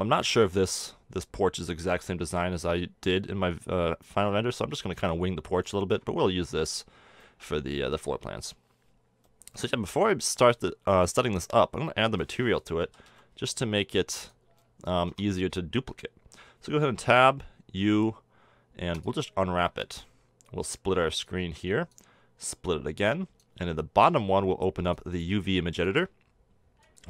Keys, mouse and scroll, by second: 5.7-7.5 middle drag, 11.3 KP_1, 12.9 s, 15.1 Tab, 17.0 u, 21.3 click.